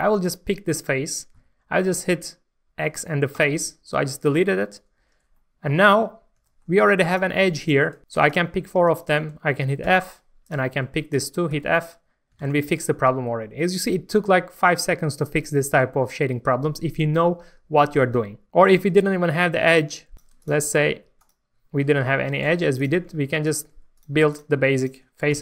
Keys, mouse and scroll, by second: 0.2 click, 1.3 click, 3.3 click, 3.9 scroll down 1, 5.0 1, 5.3 middle click, 6.1-6.4 scroll up 1, 6.4 shift+middle click, 7.1 click, 7.6 shift+click, 8.9 shift+click, 9.8 shift+f, 10.4 click, 11.1 shift+click, 11.5 shift+f, 11.9 Tab, 12.2 scroll down 1, 12.4 alt+a, 18.5 Tab, 20.1 click, 20.4 shift+click, 20.9 shift+x, 21.1 click, 21.8 click, 22.8 click, 23.4 click, 23.9 shift+click, 24.3 shift+click, 24.7 shift+click, 25.3 shift+d.